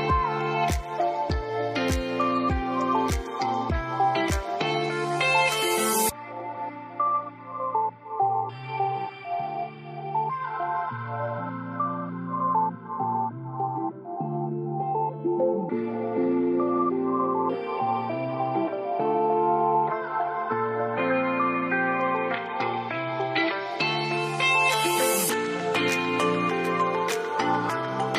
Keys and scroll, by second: 17.5-18.7 typing, 26.8 0, 26.9 Tab.